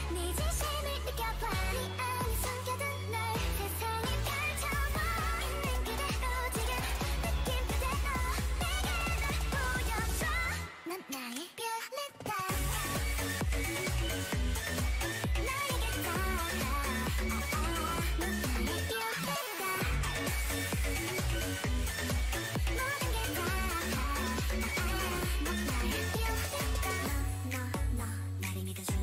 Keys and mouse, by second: 0.8-3.2 drag, 5.3 click, 9.1-11.0 right drag, 11.0-12.8 drag, 15.6 Return, 15.7 Return, 19.2-20.9 drag, 19.5 g, 21.1-22.5 drag, 25.3 Return, 27.1-28.6 drag.